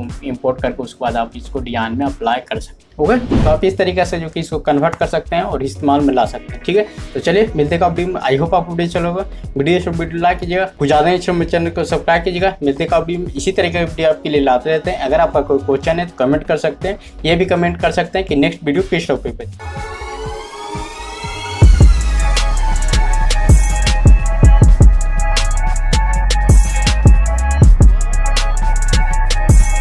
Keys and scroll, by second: 6.2 typing, 8.5 typing, 10.1 typing, 12.1-16.0 typing, 17.7-19.0 typing.